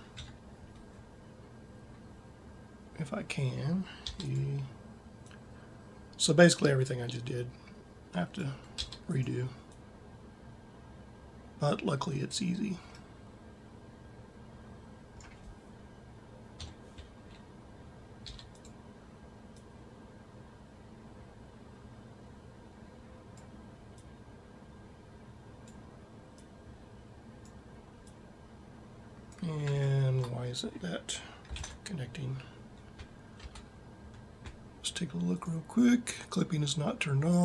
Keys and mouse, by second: 0.1 KP_7, 3.9 e, 8.7 e, 12.7 middle click, 13.1 middle click, 13.3 middle click, 16.4 KP_7, 18.1 e, 19.4-20.4 drag, 29.7 middle click, 31.5 ctrl+Up, 33.3 Tab.